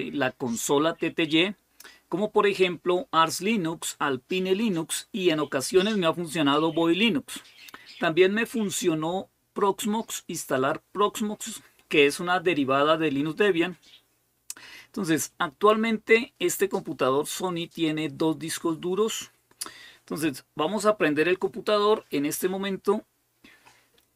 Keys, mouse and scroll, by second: 18.5-22.0 scroll down 2.